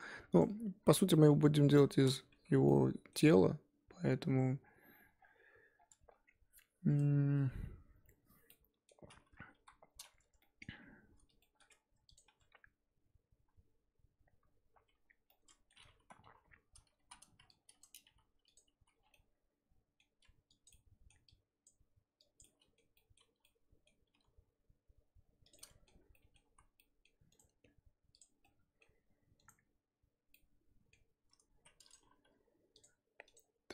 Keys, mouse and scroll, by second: 0.8-1.1 scroll down 3, 1.1 middle click, 1.4 scroll up 4, 1.6 KP_1, 2.3 Tab, 2.6-9.0 middle drag, 9.0-9.5 scroll up 3, 9.5 KP_1, 10.4 shift+middle click, 10.7-11.4 scroll up 2, 11.4 shift+middle click, 12.1 click, 12.2 Tab, 13.4 z, 14.4 z, 14.9-15.3 scroll up 1, 15.3 middle click, 16.2 KP_3, 16.6-17.1 scroll up 3, 17.1 z, 17.8 click, 18.0 g, 18.8 z, 19.0 scroll down 1, 19.1-20.6 middle drag, 20.6 click, 20.7 middle click, 21.6 click, 22.4 click, 22.4-24.1 middle drag, 24.1 g, 25.6 middle click, 25.8 Tab, 26.1 scroll down 1, 26.1 middle click, 26.4 z, 26.7 scroll down 1, 26.8-28.2 middle drag, 28.2 right click, 28.3 scroll down 1, 28.4-33.2 middle drag, 33.2 click.